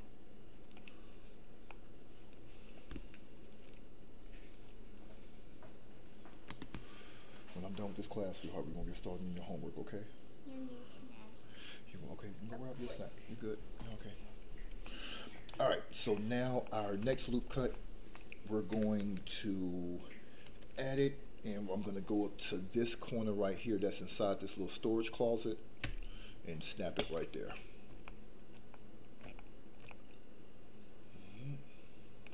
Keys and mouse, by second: 1.8 middle click, 14.9 middle click, 15.6 shift+middle click, 16.2 middle click, 16.8 shift+middle click, 17.0 middle click, 17.8 shift+middle click, 20.4 ctrl+r, 26.9 ctrl+click, 27.7 middle click, 28.3 shift+middle click, 28.9 middle click, 29.5 shift+middle click, 29.9-32.3 middle drag.